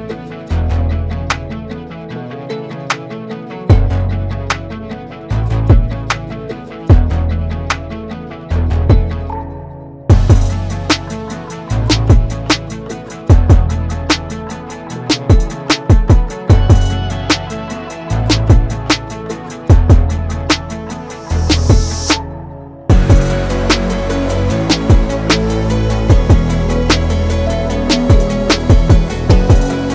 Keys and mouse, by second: 0.6-1.7 shift+middle drag, 3.1 ctrl+j, 4.5-6.3 drag, 6.8-7.9 drag, 8.9 shift+middle click, 10.2-12.4 drag, 13.4 click, 13.8 click, 14.1 click, 14.8-16.8 middle drag, 18.0 click, 19.1-19.4 shift+middle drag, 21.1 shift+middle drag, 21.6-21.9 shift+middle drag, 23.1-23.6 middle drag, 23.9 shift+middle drag, 24.7-25.5 middle drag, 25.7-26.3 middle drag, 26.9 click, 27.7 Tab, 28.2 Tab, 28.7 click.